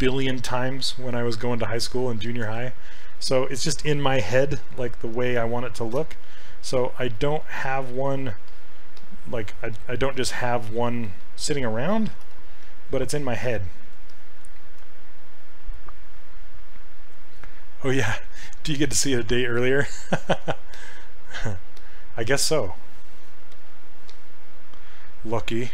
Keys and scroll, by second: 10.5 ctrl+z, 12.2 ctrl+w.